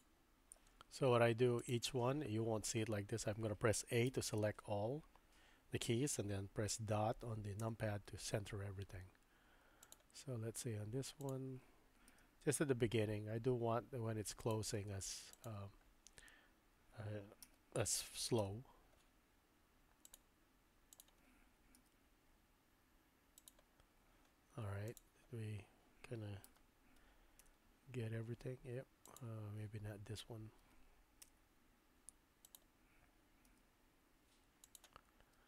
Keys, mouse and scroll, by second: 1.6 click, 4.1 a, 7.6 KP_Decimal, 9.8 click, 12.7 g, 17.4 a, 18.4 KP_Decimal, 20.9 click, 21.8 g, 24.9 click, 26.5 a, 27.4 KP_Decimal, 29.1 click, 30.5 a, 31.2 KP_Decimal, 32.4 click, 34.4 g, 35.2 space.